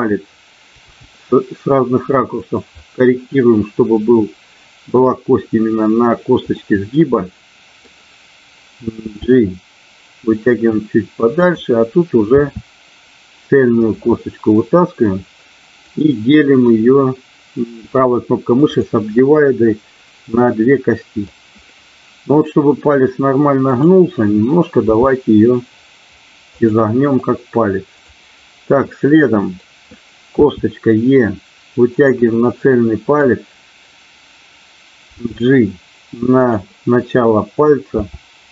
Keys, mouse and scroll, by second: 0.7 g, 2.5 click, 2.7-4.8 middle drag, 6.5-8.0 middle drag, 9.1 g, 11.5 click, 12.3 e, 13.8 click, 14.1-15.1 middle drag, 15.7 click, 16.5-20.5 right drag, 20.5 middle click, 23.7 click, 24.7 g, 26.5 click, 28.7 middle click, 30.3 e, 32.0 click, 32.3 middle click, 35.2 g, 37.6 click.